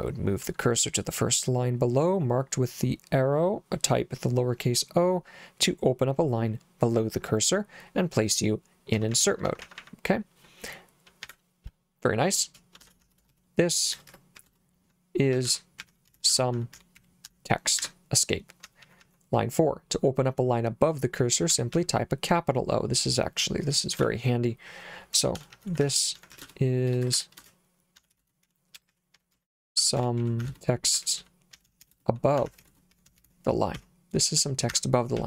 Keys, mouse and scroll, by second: 8.9-9.8 typing, 11.2 o, 12.6-19.0 typing, 17.8 Escape, 21.5 j, 21.7 j, 23.9 shift+o, 25.1-33.8 typing, 34.7 Escape, 35.2 j.